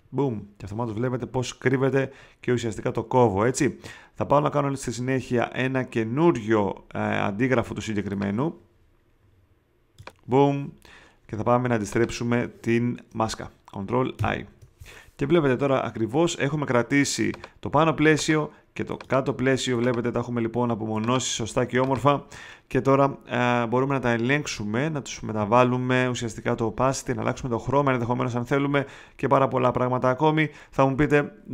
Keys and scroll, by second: 14.1 super+i.